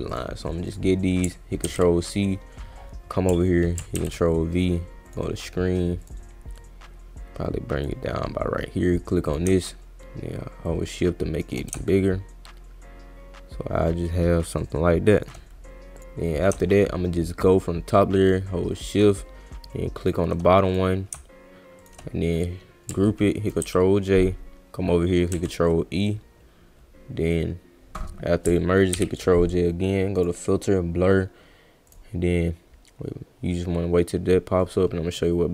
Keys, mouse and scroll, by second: 0.1 click, 0.7 click, 1.6 ctrl+c, 2.0 click, 3.9 ctrl+v, 5.1 click, 6.0 click, 6.6-7.8 drag, 9.2 click, 10.6 shift+click, 11.8-15.2 shift+drag, 20.0 shift+click, 20.7 click, 21.8 shift+click, 22.3 click, 25.3 ctrl+e, 30.2 click, 31.9 click.